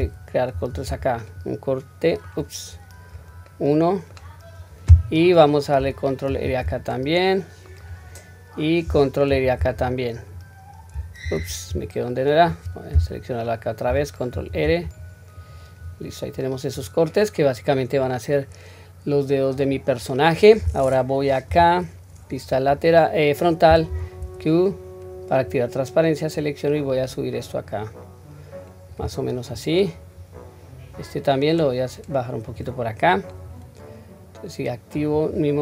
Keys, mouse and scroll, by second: 0.5 ctrl+r, 3.5 middle click, 6.3 ctrl+r, 11.2 ctrl+z, 16.1-17.1 scroll down 2, 16.4-19.5 middle drag, 19.9-21.5 scroll up 1, 21.5-21.9 scroll up 1, 21.5 KP_1, 22.8-23.9 scroll up 2, 23.9 q, 24.7 click, 26.4-28.9 drag, 29.5 click, 30.7-32.6 drag, 33.1-33.7 scroll down 1, 33.7-35.0 scroll down 1, 35.0 click.